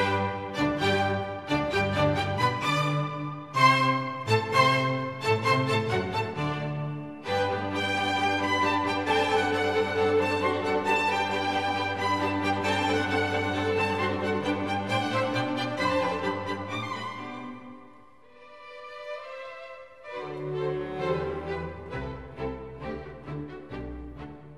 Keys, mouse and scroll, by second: 1.1 right click, 3.2 right click, 23.6 Down.